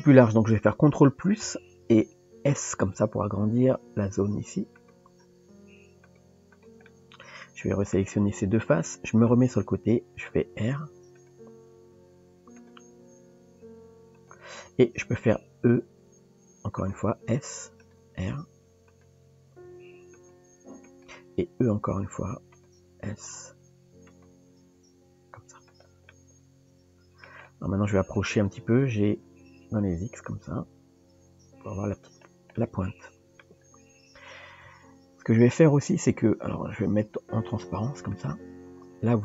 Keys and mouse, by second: 1.5 ctrl+KP_Add, 2.9 s, 6.0 click, 6.9-7.9 middle drag, 9.3 KP_3, 10.6 r, 11.4 g, 13.9 r, 16.1 e, 17.2 s, 18.2 r, 19.7 g, 21.9 e, 22.8 s, 24.3 g, 26.1-27.2 middle drag, 28.8 g, 32.6 middle click, 34.6 KP_3, 35.9 Tab, 38.1 click.